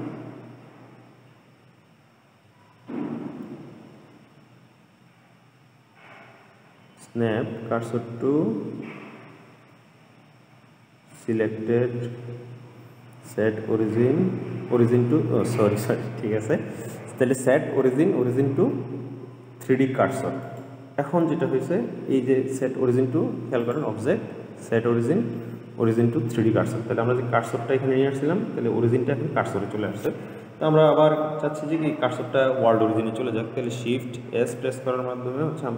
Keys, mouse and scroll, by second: 23.9-27.0 drag, 34.5 shift+s.